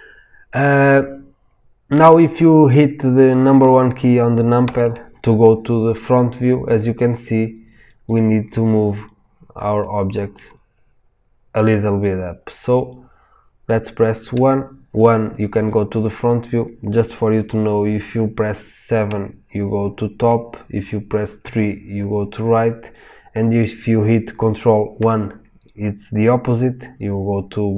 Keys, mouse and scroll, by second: 4.6 KP_1, 8.0 click, 9.7-10.1 middle drag, 12.4-19.0 middle drag, 14.3 KP_1, 19.0 KP_7, 21.4 KP_3, 24.9 ctrl+KP_1, 24.9-27.7 middle drag.